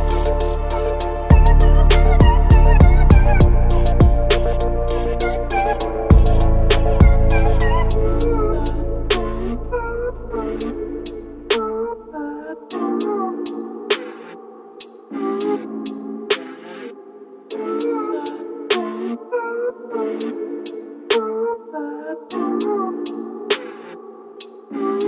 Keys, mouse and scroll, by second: 1.4 click, 3.8 click, 7.9 shift+click, 8.5 shift+click, 9.7-10.9 middle drag, 11.7 shift+click, 12.5 shift+click, 13.8 shift+click, 15.8 shift+click, 16.4 shift+click, 18.2-19.6 middle drag, 22.8 shift+click, 23.9 shift+click.